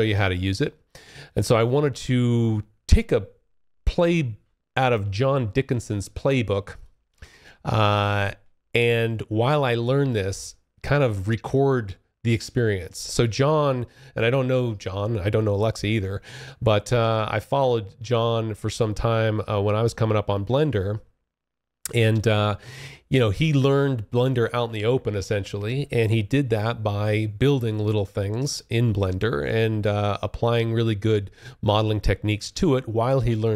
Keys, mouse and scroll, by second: 0.0-0.8 scroll up 3, 0.8-3.5 scroll up 7, 5.8 click, 27.5-28.3 scroll down 2, 28.3-29.8 scroll down 1, 29.8 scroll up 1, 31.2-32.5 scroll down 2, 32.5-33.3 scroll up 3, 33.3-33.5 scroll up 1.